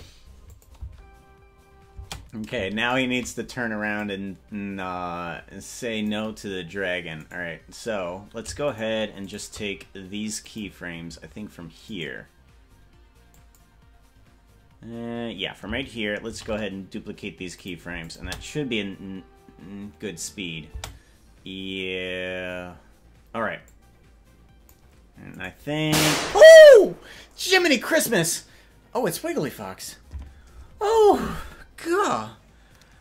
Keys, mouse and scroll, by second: 0.7 click, 1.0 space, 2.2 space, 3.0 shift+right click, 4.1-6.3 drag, 7.4 right click, 8.8 shift+right click, 9.4 shift+right click, 10.5 click, 12.0 right click, 13.4 click, 16.4 shift+d, 18.2 click, 18.6 space, 21.0 space, 23.8-25.0 drag, 25.6 right click.